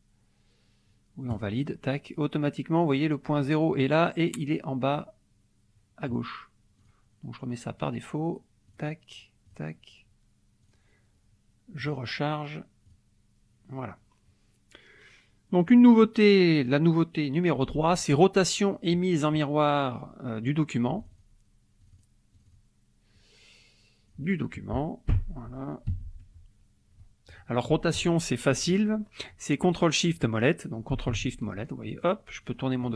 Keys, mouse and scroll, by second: 1.3 click, 6.8 click, 8.7 click, 9.5 click, 10.6 click, 11.8 click, 12.8 click, 21.0 click, 21.9 click, 22.3 click, 23.1-24.3 drag, 25.1 u, 25.9 F1, 27.0 scroll up 2, 27.3 click, 31.3-32.7 ctrl+shift+scroll down 2, 32.7-32.9 ctrl+shift+scroll down 1.